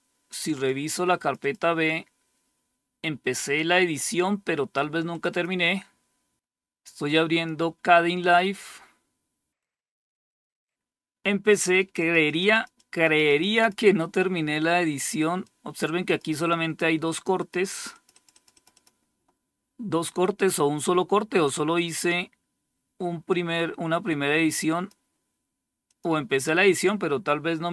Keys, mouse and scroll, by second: 0.6 click, 4.6 click, 4.8 click, 9.1 click, 11.4 click, 11.7 click, 12.0 click, 12.3 click, 12.5 click, 12.9 click, 13.6 click, 14.9-16.4 drag, 16.8 click, 17.3-18.4 drag, 22.7-24.4 drag, 25.3 click.